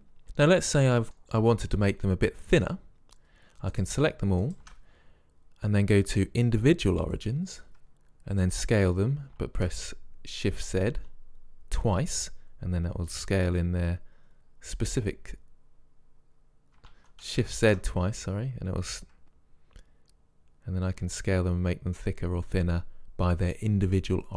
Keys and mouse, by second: 0.2-1.4 middle drag, 2.0-3.8 middle drag, 3.8-5.8 drag, 6.3-7.5 drag, 7.7-8.8 middle drag, 8.5 s.